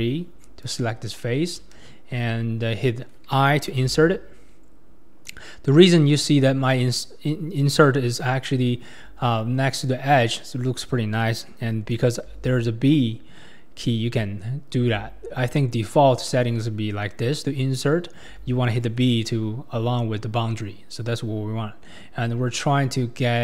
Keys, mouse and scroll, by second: 0.6 click, 1.2 middle click, 1.7 ctrl+KP_3, 2.3 scroll up 4, 6.6 typing.